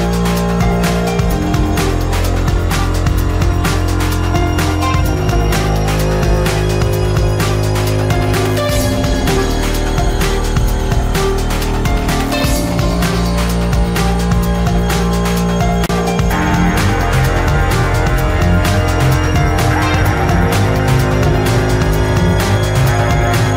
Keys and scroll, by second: 13.7 space.